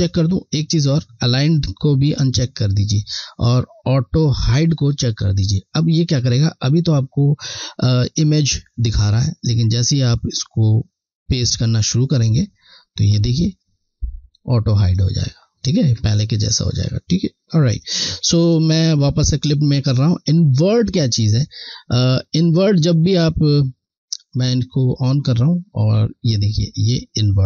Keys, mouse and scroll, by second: 4.5 click, 10.1 click, 17.7 click, 17.9 click, 18.0 click, 21.5 scroll, 23.5 alt+scroll down 1, 25.0 click.